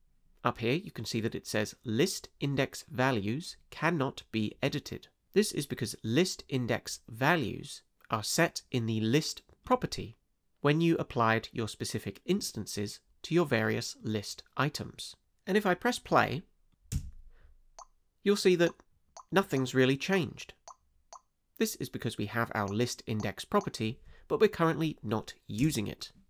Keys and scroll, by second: 16.9 space, 25.6 space.